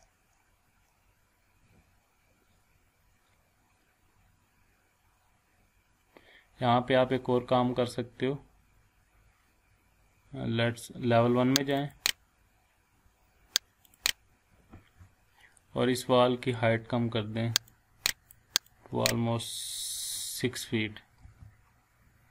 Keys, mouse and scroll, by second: 0.5 scroll up 1, 1.0 scroll down 1, 3.2 scroll up 1, 3.8 scroll down 1, 4.4-4.9 scroll up 1, 6.8 scroll down 1, 7.3 scroll up 1, 8.1 scroll down 1, 11.6 click, 17.7-18.6 drag, 21.2 6.